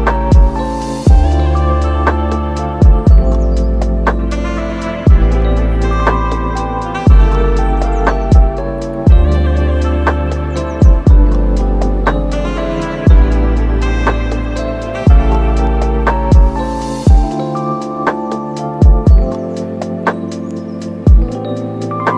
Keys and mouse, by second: 0.2 Tab, 0.2 middle click, 0.7 super+s, 0.8 middle click, 1.2 middle click, 1.9-6.6 middle drag, 6.5 super+s, 6.9 middle click, 7.3 middle click, 7.5 shift+a, 8.4 s, 8.9 right click, 10.1 right click, 10.7 middle click, 10.8 super+s, 11.1 right click, 11.6 right click, 12.3 shift+middle click, 12.4 s, 13.4 middle click, 13.8 click, 13.8 right click, 14.2 middle click, 14.5 shift+middle click, 14.8 super+s, 15.4 middle click, 15.9 s, 19.5 shift+middle click, 19.7 middle click, 20.2 click, 20.5 click, 20.7 super+s, 21.2 shift+d.